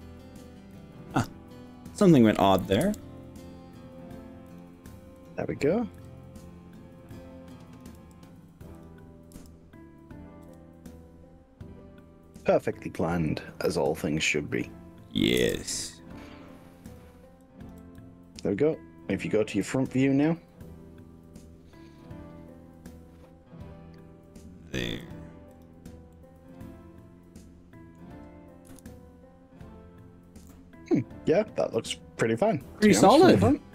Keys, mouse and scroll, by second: 0.9 click, 1.3 click, 2.9 g, 4.5 click, 5.3 click, 6.0 g, 7.6 click, 8.1 f, 8.9 click, 9.5 f, 10.4 g, 12.5 click, 13.1 click, 15.5 g, 16.9 click, 17.5 click, 17.9 g, 25.1 click, 25.5 click, 26.1-27.3 middle drag, 27.5 middle click, 28.7 KP_1, 32.5-33.7 middle drag.